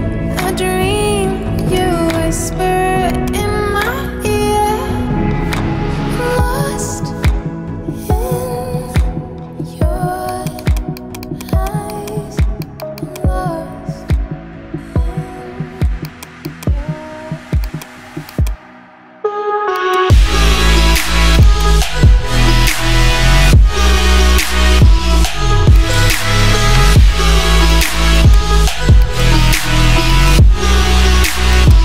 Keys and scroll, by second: 14.5 ctrl+0, 22.3-24.6 typing.